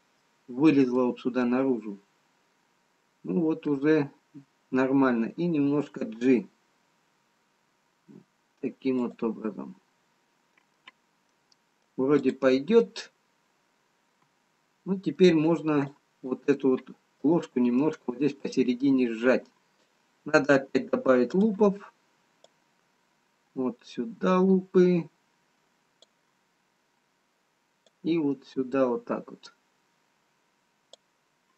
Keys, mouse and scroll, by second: 0.2 middle click, 3.3 middle click, 5.7 g, 9.5 middle click, 11.4 middle click, 12.9 middle click, 12.9 click, 19.2 middle click, 21.9 click, 22.7 click, 28.0 click.